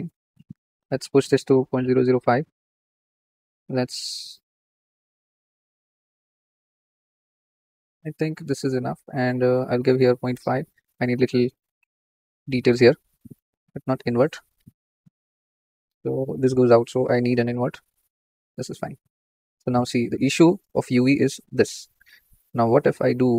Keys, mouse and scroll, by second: 2.1 click, 3.5-10.2 middle drag, 10.2-13.9 drag, 15.0-15.3 shift+middle drag, 15.3 scroll up 3, 17.3 click, 19.3 scroll down 3, 19.8 scroll up 2, 20.2 middle drag, 20.8-23.3 middle drag.